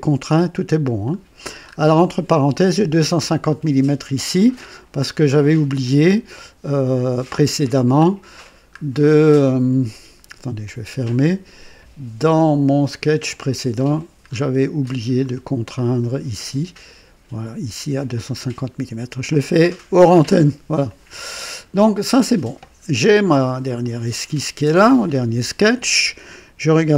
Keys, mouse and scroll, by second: 0.7-1.0 scroll down 2, 1.7-2.0 scroll up 2, 3.0-4.3 drag, 7.9-8.8 scroll down 4, 10.6 click, 13.3 click, 14.3-14.6 scroll up 2, 14.8-15.4 right drag, 16.0 right click, 17.9 click, 20.9 click, 22.0 click, 23.8 click.